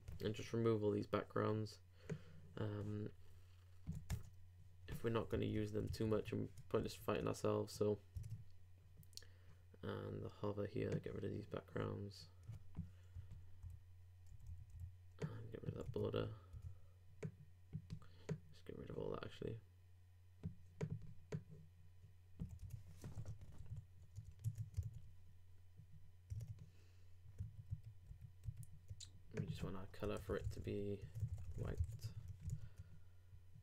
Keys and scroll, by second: 5.5 super+BackSpace, 5.9 super+s, 6.1 super+Tab, 6.8 super+r, 8.2 super+Tab, 23.6 super+space, 23.7 super+s, 24.4 super+Tab, 24.8 super+r, 26.3 super+Tab, 27.4 super+2, 27.7 super+3, 28.1 super+4, 28.4 super+3, 31.8 super+;, 31.9 super+s, 32.0 super+Tab, 32.5 super+r.